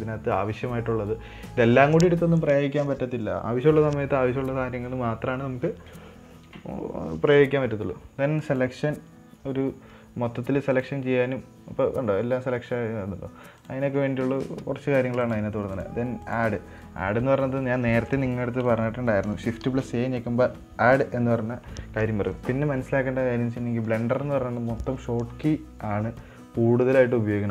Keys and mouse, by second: 9.0 click, 14.0-14.9 drag, 15.7 click, 16.8 click, 20.0 shift+a.